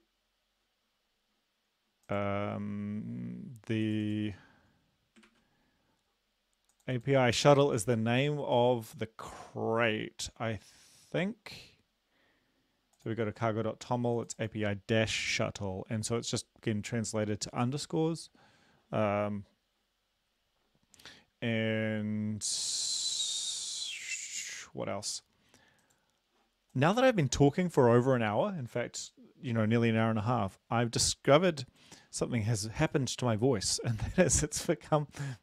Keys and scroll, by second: 5.2 ctrl+`.